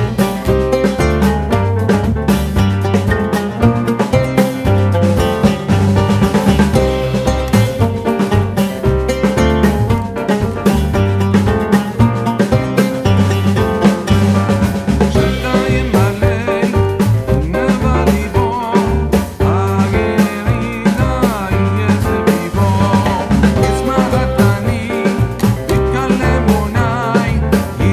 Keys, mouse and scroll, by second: 0.5 click, 0.5 typing, 2.0 click, 2.3-4.6 scroll up 1, 6.6 click, 6.8 right click, 7.4 click, 9.3-13.9 drag, 9.3 typing, 15.4 right click, 16.8 click, 19.8 shift+k, 21.8-22.8 typing, 26.4 click.